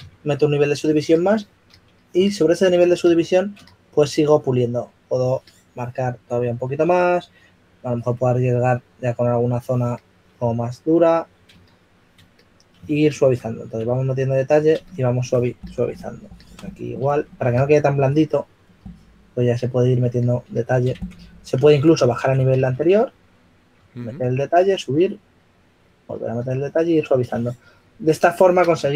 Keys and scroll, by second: 3.5 d, 5.2 s, 13.9 4, 17.7 s, 21.6-24.8 typing.